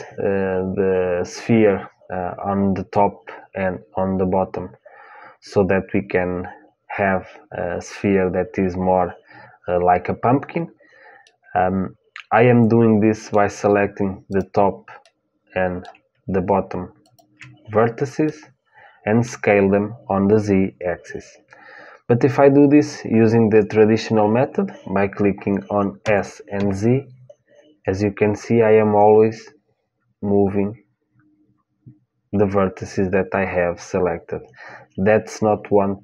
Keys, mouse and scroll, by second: 11.0-13.0 middle drag, 14.0-16.1 drag, 14.8-16.9 middle drag, 16.7-19.0 drag, 18.0-25.8 middle drag, 25.8 s.